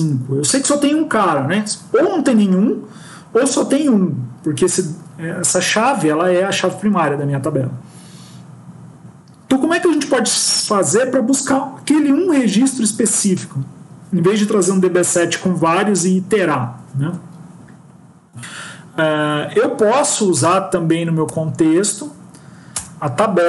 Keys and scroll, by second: 22.6 Return.